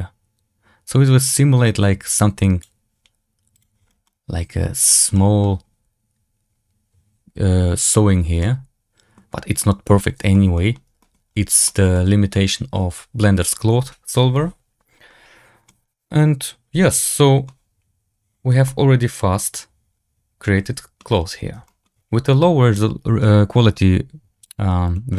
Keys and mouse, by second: 4.0-4.8 middle drag, 5.0 middle drag, 8.3-9.0 middle drag, 9.5-9.9 middle drag, 10.2 middle drag, 10.4 middle drag, 10.9 shift+middle drag, 11.5 shift+middle drag, 11.8-12.2 middle drag, 15.6-17.3 middle drag, 18.6-20.9 middle drag, 21.6 shift+middle click, 24.3 click, 24.8 click.